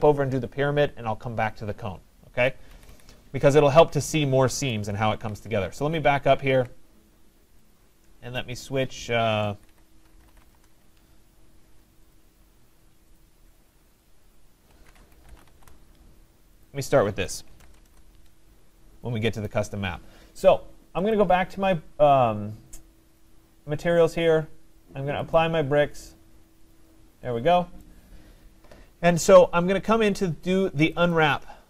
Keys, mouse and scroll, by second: 2.0 scroll, 2.7 Escape, 2.9 Escape, 3.5 scroll, 5.4 ctrl+z, 7.7 click, 9.5 Escape, 9.7 Escape, 9.9-10.9 typing, 13.1-13.8 typing, 13.2 click, 13.6 shift+click, 14.1 shift+click, 14.5 shift+click, 15.6 Return, 16.6 typing, 17.9 Return, 19.5 right click, 21.2 click, 24.2 click, 25.4 right click, 26.7 click, 27.9 right click, 31.1 click.